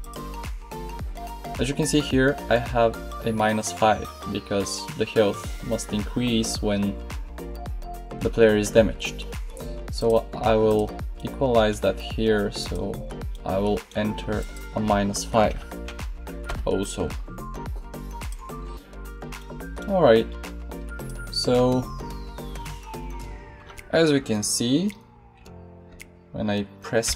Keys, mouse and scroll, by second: 4.6-9.9 middle drag, 20.9 right click, 27.0 p.